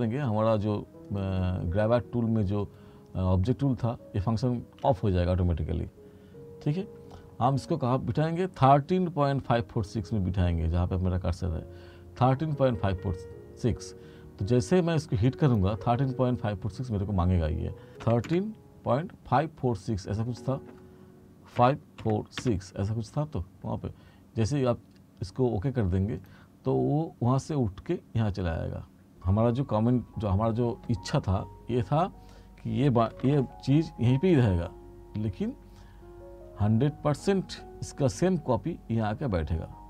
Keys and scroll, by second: 18.1 1, 21.7 5, 33.3 ctrl+z.